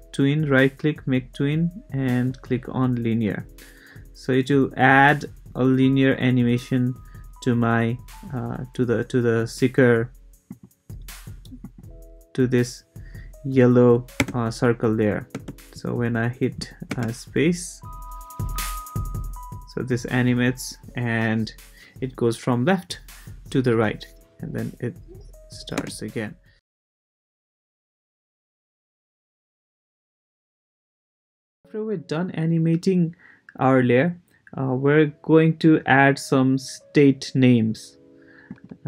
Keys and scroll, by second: 14.2 space, 15.3 space, 16.9 space, 25.8 space.